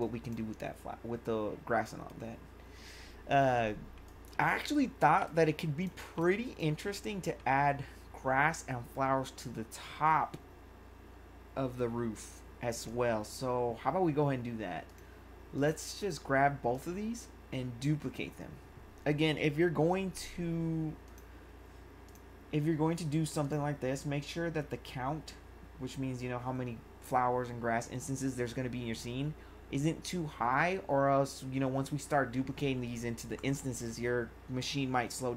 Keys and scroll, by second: 5.3 1.